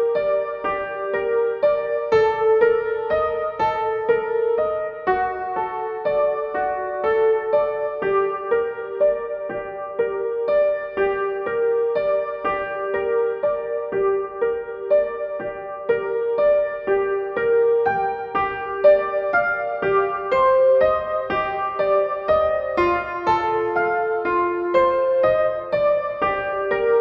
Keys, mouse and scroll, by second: 1.8 click, 4.7 click, 10.5 click, 12.7 click, 18.1-24.5 drag, 24.5-26.0 typing.